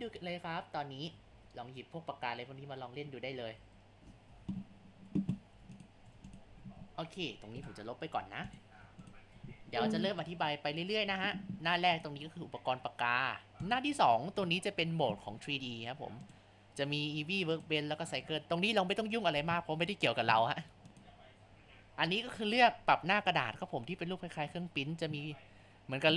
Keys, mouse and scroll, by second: 0.0 ctrl+z, 0.2 ctrl+z, 0.5 click, 1.2 ctrl+z, 1.4 ctrl+z, 1.6-3.5 drag, 3.5 ctrl+z, 3.8 click, 4.3 ctrl+z, 5.5 Tab, 6.1 Tab, 6.5 a, 7.6 Delete, 8.8 Tab, 10.0-11.9 shift+middle drag, 11.9 click, 13.6 click, 16.2-17.6 drag, 20.9 click.